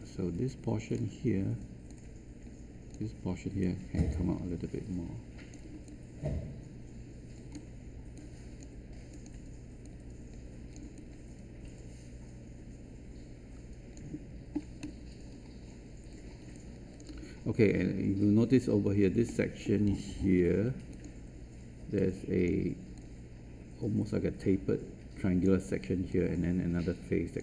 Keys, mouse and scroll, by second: 1.8-5.6 drag, 5.8-7.5 alt+drag, 8.1 click, 10.9-13.9 alt+drag, 16.5 alt+click, 19.2 alt+middle click, 20.4 ctrl+1, 20.9-27.4 drag.